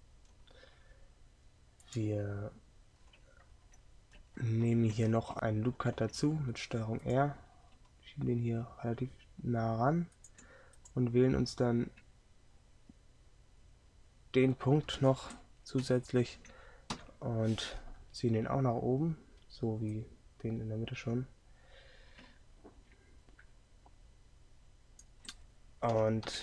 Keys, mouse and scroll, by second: 5.8 ctrl+r, 17.0 KP_3, 26.3 KP_7.